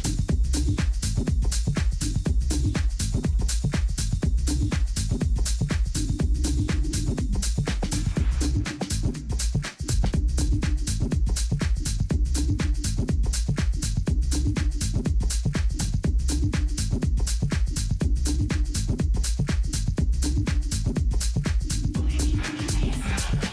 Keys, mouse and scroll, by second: 0.3 a, 0.7 a, 1.5-3.8 middle drag, 9.1-11.2 middle drag, 11.2 KP_1, 12.9 middle click, 16.6 n, 18.1-20.0 drag, 20.3-23.5 middle drag, 23.2 z.